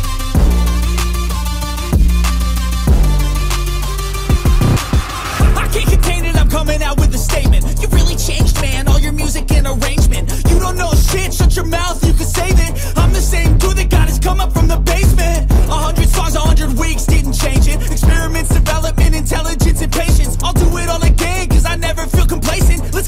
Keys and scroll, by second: 10.4 ctrl+t, 17.1 Return.